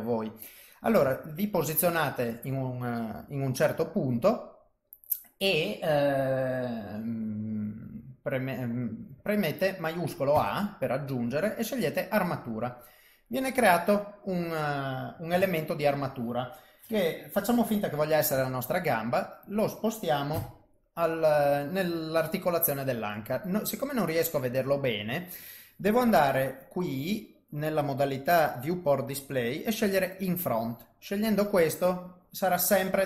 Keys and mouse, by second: 1.5 shift+right click, 8.3 click, 10.3 shift+a, 15.3 KP_3, 19.4 g, 20.3 KP_1, 26.1 click, 30.1 click, 31.0 middle click.